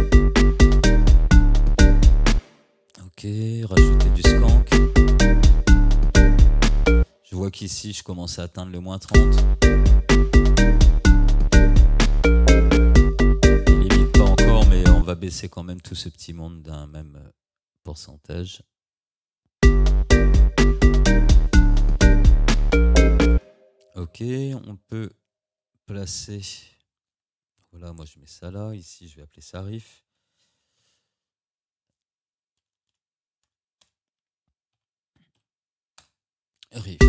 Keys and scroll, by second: 2.4 space, 3.8 space, 7.1 space, 9.2 space, 15.1 space, 19.7 space, 23.4 space, 29.4 ctrl+r, 32.6 BackSpace, 34.8 i, 36.0 Return.